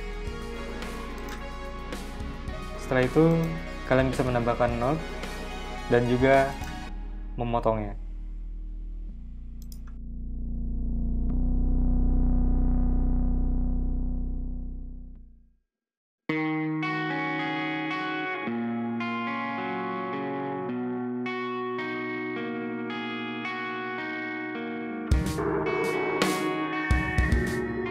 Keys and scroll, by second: 10.0-12.4 typing, 14.3 2, 14.5 Return, 15.5 a, 16.9 v, 17.3 BackSpace, 18.2 super+c, 18.3 super+v, 19.0 BackSpace, 20.5-22.3 typing, 23.5 v, 23.8 BackSpace, 24.3 a, 25.7-27.7 typing, 26.0 super+z.